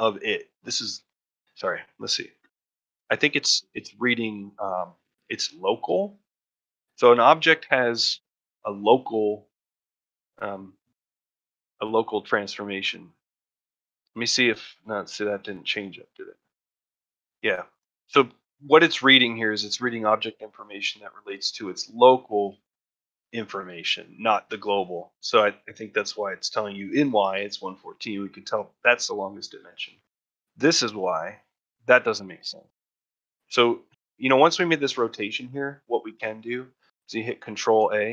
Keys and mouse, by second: 10.6-28.2 drag, 28.2 middle drag, 29.9 middle click, 31.3 middle drag, 32.5 middle drag, 32.9 middle drag.